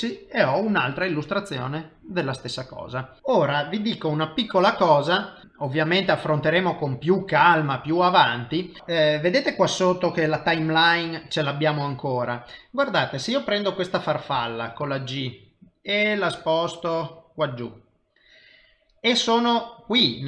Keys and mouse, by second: 3.2 click, 14.7 g.